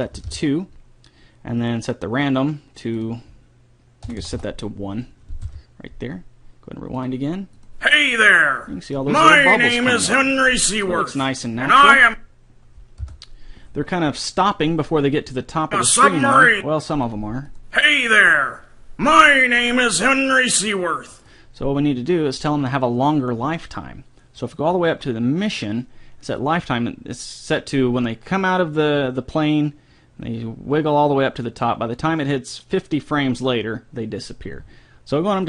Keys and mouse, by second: 2.7-4.5 drag, 7.4-9.9 drag, 9.5-11.1 middle drag, 12.5-14.3 drag, 13.5 n, 16.0-19.8 drag.